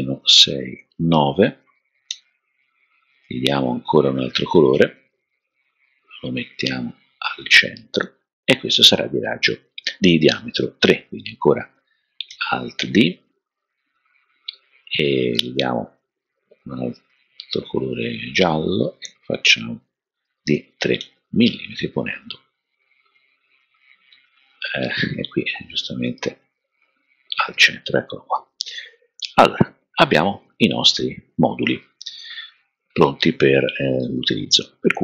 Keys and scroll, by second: 0.8 typing, 2.0 typing, 5.1 typing, 12.3 super+d, 20.5 3.